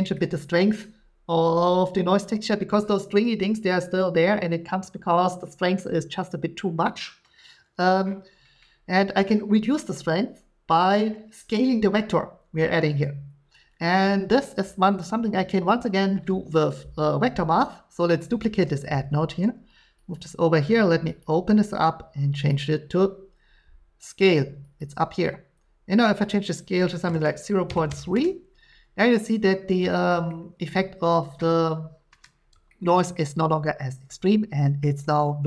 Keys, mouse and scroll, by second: 0.2 middle click, 15.0 click, 18.5 shift+d, 20.1 click, 21.2 click, 22.5 click, 24.8 click, 27.0-27.9 typing, 30.1 shift+middle click, 32.1 middle click, 32.5 shift+middle click, 34.8 middle click.